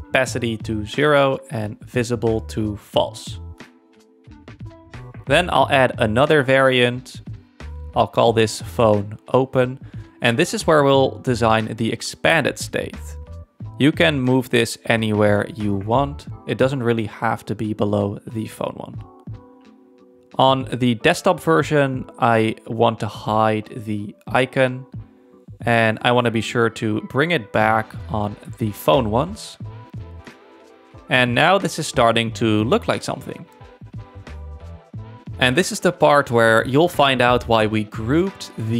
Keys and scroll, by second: 4.2 super+-, 8.8-11.7 typing, 15.8 alt+Up, 17.3 space.